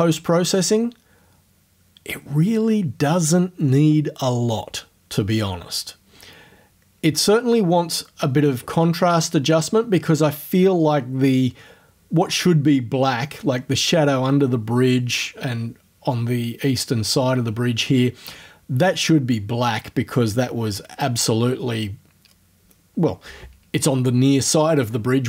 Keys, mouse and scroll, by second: 9.4-9.8 scroll up 2, 10.0 scroll up 2.